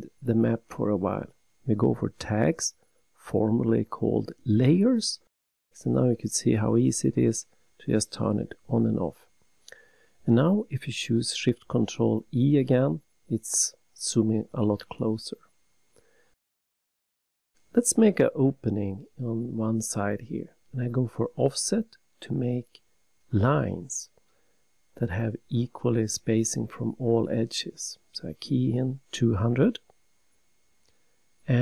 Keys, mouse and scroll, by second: 0.9 click, 3.9 click, 12.4 ctrl+shift+e, 14.7 middle click, 16.8 click, 16.9 click, 17.4-17.7 scroll up 3, 19.4 click, 20.9 click, 24.4 click, 27.0 click, 31.2-31.6 typing.